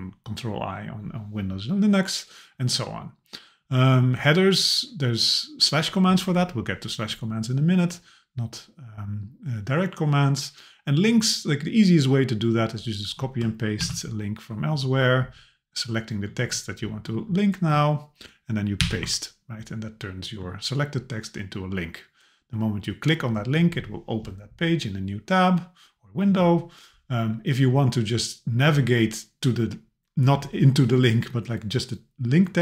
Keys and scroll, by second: 13.8 super+c, 18.8 super+v.